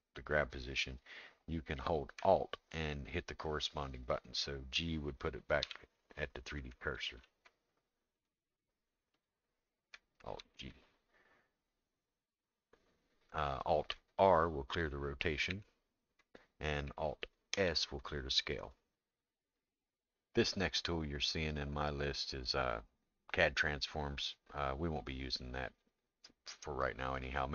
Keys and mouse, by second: 8.2 click, 9.1 click, 10.4 alt+g, 15.5 alt+r, 17.5 alt+s.